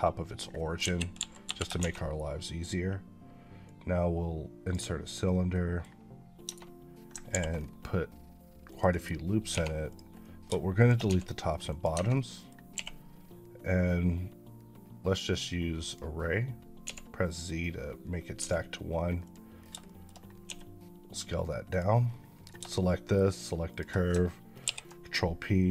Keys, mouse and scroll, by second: 0.3-0.6 scroll down 1, 1.0 KP_5, 1.3 KP_5, 1.6 shift+a, 3.5 click, 5.4 middle click, 6.3 Tab, 7.1 ctrl+r, 7.4 scroll up 3, 8.5 click, 8.8 right click, 9.3 3, 9.7 click, 10.1 middle click, 10.6 shift+click, 10.9 x, 11.5 click, 11.8 Tab, 12.0 middle click, 12.6 q, 15.7 click, 16.7 z, 18.0 scroll up 2, 19.1 click, 19.4 scroll down 1, 19.7 shift+middle click, 20.0 scroll down 1, 20.3 s, 21.5 click, 21.9 scroll up 1, 22.7 shift+middle click, 23.6 shift+click, 24.5 ctrl+p.